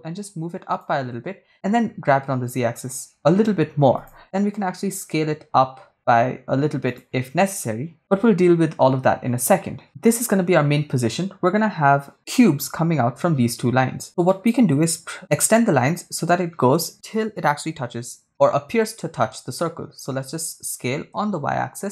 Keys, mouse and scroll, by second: 1.1 ctrl+click, 2.3 g, 2.8 z, 4.6 shift+click, 5.4 shift+s, 7.1 shift+click, 14.5 right click, 20.0 s, 21.6 y.